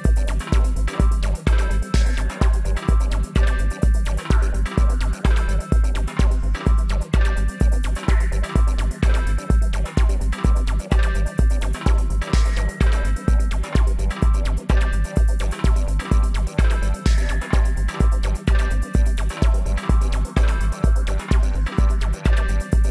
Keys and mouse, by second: 1.0 alt+s, 2.2 KP_3, 2.7 KP_5, 3.7 middle click, 4.9 a, 6.7-8.0 middle drag, 8.0 z, 8.8-10.5 drag, 11.2-12.3 drag, 12.3 middle click, 13.1 KP_3, 13.6-15.8 middle drag, 15.0 g, 15.8 click, 17.3-19.1 drag, 19.0-21.4 middle drag, 22.0-22.9 right drag.